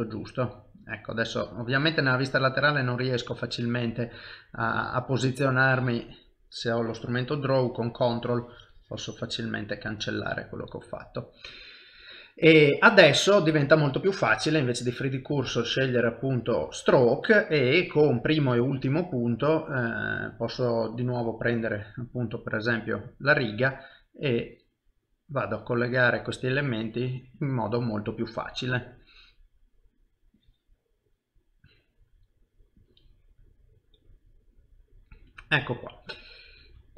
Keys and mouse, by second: 1.4 KP_3, 2.2 middle click, 4.7 KP_3, 5.6 click, 6.5 shift+middle click, 6.5 ctrl+click, 7.0 click, 7.7 ctrl+click, 10.0 middle click, 11.6 shift+middle click, 12.0 middle click, 14.5 click, 18.7 click, 22.5 middle click, 24.3 click, 28.2 middle click, 30.4 click, 31.7 middle click, 32.8 click, 34.3 middle click, 35.4 ctrl+middle click, 35.8 middle click.